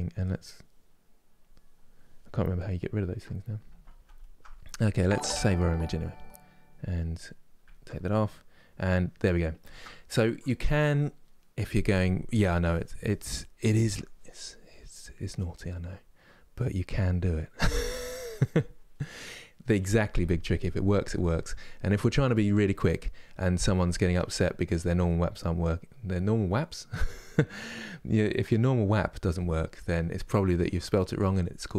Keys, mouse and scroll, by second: 2.2-5.9 ctrl+middle drag, 5.9 click, 7.4-31.7 ctrl+middle drag.